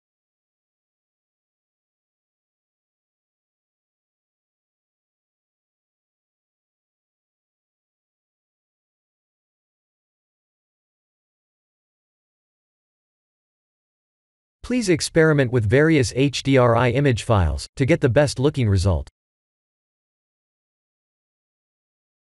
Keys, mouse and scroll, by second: 5.1 ctrl+space, 7.6 click, 9.0 KP_0, 12.4 click, 16.5 click, 20.9 n.